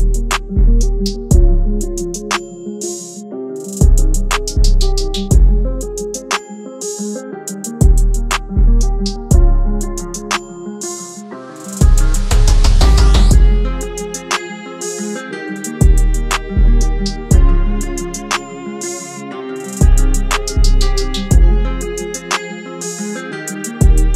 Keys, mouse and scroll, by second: 0.1-1.3 alt+scroll up 1, 6.9-7.2 alt+scroll up 1, 16.4 alt+shift+click, 19.6 alt+shift+click, 22.4 Down, 22.4 Up, 22.5 Down, 22.9 Return.